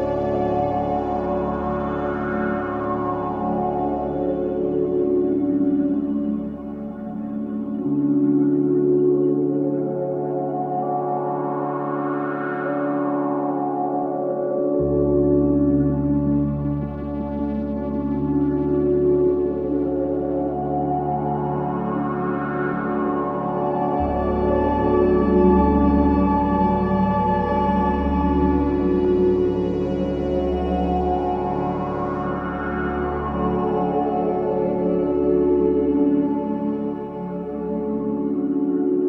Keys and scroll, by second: 5.2 ], 5.4 Delete, 7.3 4, 8.1 F1, 8.2 F2, 10.8 F1, 10.9 F2, 19.2 3, 23.9 ctrl+z, 28.6 F1, 28.8 F2, 33.6 4.